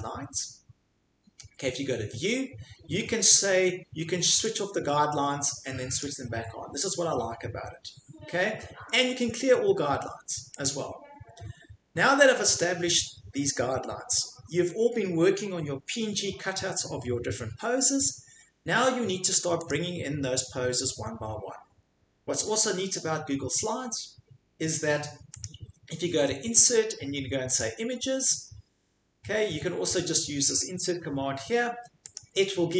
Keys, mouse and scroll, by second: 4.6 click, 6.0 click, 10.6 click, 19.7 click, 25.4 click, 27.6 click, 32.1 click.